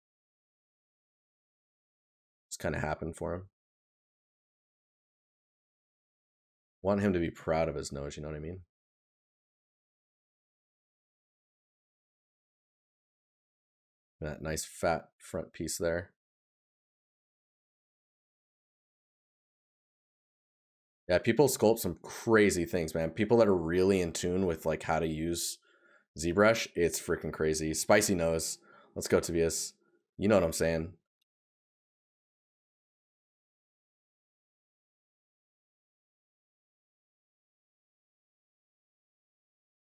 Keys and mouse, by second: 3.0 right click, 13.6 right click, 17.3 right click, 23.0 right click, 25.3 right click, 26.9 right click, 33.4 right click.